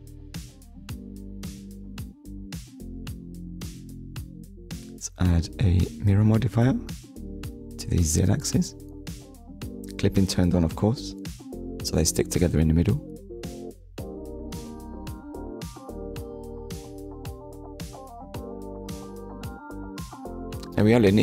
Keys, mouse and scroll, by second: 0.2 Tab, 0.7 middle click, 1.9 shift+middle click, 3.4 click, 4.1 click, 5.5 click, 6.7 click, 7.4 click, 8.1 middle click, 9.3 click, 10.3 KP_1, 11.8 Tab, 12.7 Tab, 13.3 middle click, 15.0 middle click, 18.9 click, 19.7 ctrl+s.